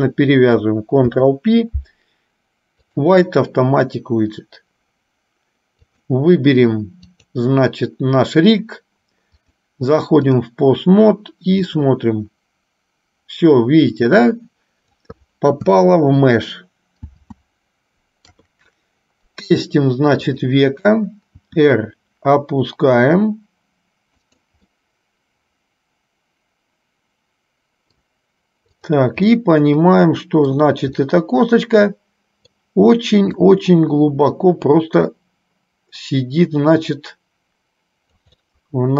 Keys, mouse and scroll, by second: 6.1 click, 7.5 click, 9.6-10.7 drag, 11.8 click, 12.2-15.5 drag, 17.3 ctrl+z, 18.6 KP_3, 20.5 click, 21.7 r, 25.0-28.2 middle drag, 29.0 click, 29.7-30.7 middle drag, 31.2-32.8 middle drag, 33.6-38.6 drag, 38.6-38.9 middle drag.